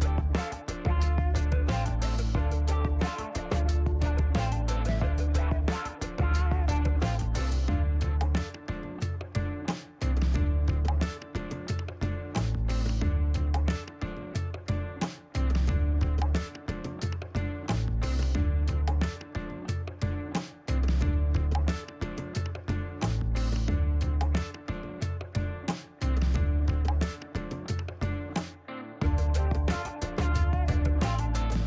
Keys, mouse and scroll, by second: 1.9 click, 2.3 click, 3.1 click, 4.4 KP_1, 4.5 KP_7, 6.9 click, 7.9 shift+right click, 11.2 scroll down 2, 12.2 click, 12.4 space, 13.7 shift+right click, 14.9 scroll down 2, 16.2 shift+right click, 17.5 shift+scroll down 1, 17.9 middle click, 18.5 shift+right click, 20.3 middle click, 25.8 click, 26.0 space, 26.7 shift+right click, 27.4 shift+scroll down 1, 28.0 shift+right click, 29.5 shift+right click, 30.8 scroll up 2, 31.3 middle click.